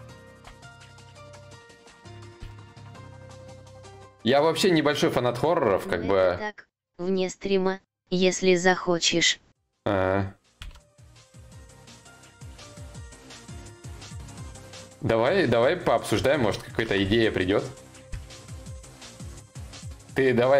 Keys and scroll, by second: 10.3 ctrl+z, 16.4 ctrl+z.